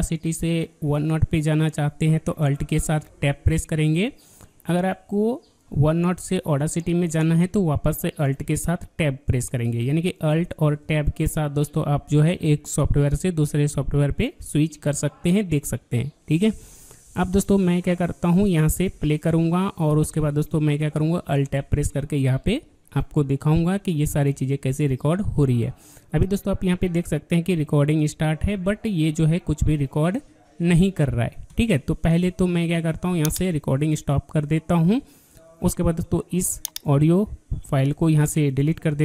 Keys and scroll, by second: 3.1 alt+Tab, 8.4 alt+Tab, 17.3 alt+Tab, 18.4 alt+Tab.